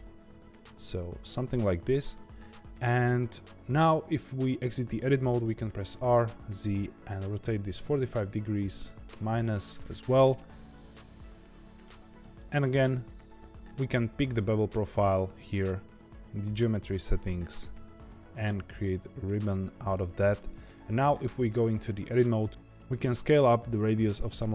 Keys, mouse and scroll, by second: 2.4-2.8 scroll down 2, 2.8-5.7 middle drag, 5.7 r, 10.1-12.7 middle drag, 12.7-13.2 scroll down 1, 14.9 click, 18.0-19.9 middle drag, 19.9 scroll down 1, 20.2-20.7 scroll up 2, 20.7 middle click, 21.1 Tab, 21.5 shift+middle click.